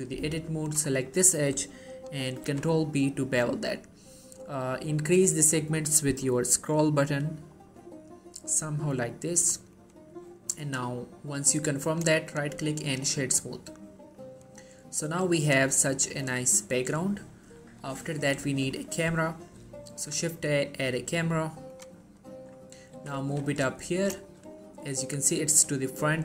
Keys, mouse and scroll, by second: 0.8 click, 1.0 middle click, 2.6 ctrl+b, 3.9-4.3 scroll up 2, 4.3-5.2 scroll down 2, 5.2-5.6 scroll up 2, 5.6-6.3 scroll down 2, 6.3-6.8 scroll up 1, 6.8-7.3 scroll down 1, 7.6 scroll up 1, 9.9 click, 12.4 right click, 13.0 click, 13.4-14.3 middle drag, 17.9-18.3 scroll up 1, 18.3-18.6 scroll down 1, 18.6 shift+middle click, 19.4-19.7 scroll up 1, 20.1 shift+a, 21.8 click, 22.2 scroll down 1, 22.3 middle click, 22.7-23.1 scroll up 1, 23.1 typing, 24.1 click, 24.4 shift+middle click, 24.8-26.2 middle drag.